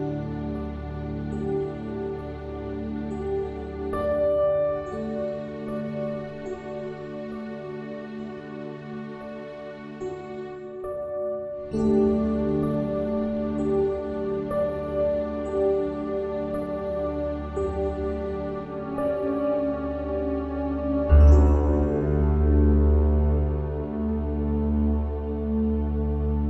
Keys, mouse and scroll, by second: 9.8-11.7 right drag, 10.7 shift+a, 15.4 r, 21.2 r.